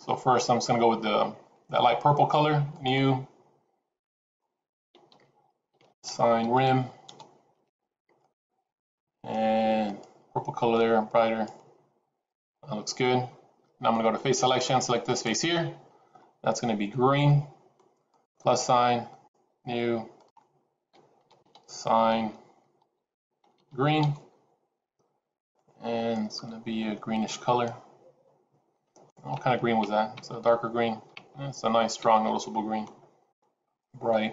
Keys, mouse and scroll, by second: 2.6 click, 4.1 click, 8.1 click, 12.2 click, 14.4 click, 15.0 click, 18.0 click, 19.0 click, 20.0 click, 23.5 e, 25.4 click.